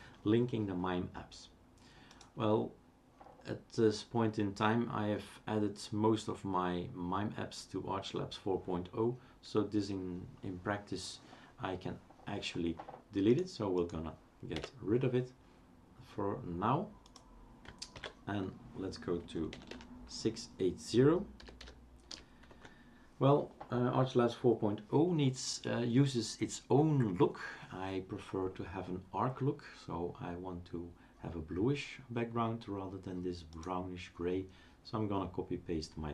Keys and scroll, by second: 14.5 Delete, 17.9 ctrl+c, 19.7 typing, 21.2-22.6 typing, 23.7 typing.